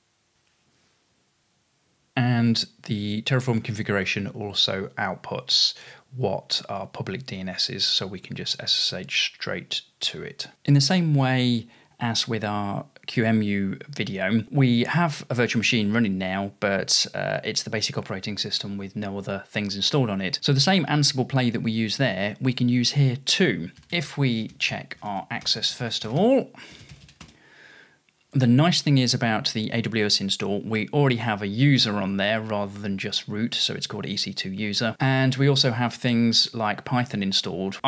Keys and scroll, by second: 1.2-2.0 typing, 23.6-27.7 typing, 30.0 typing, 37.5-37.8 typing.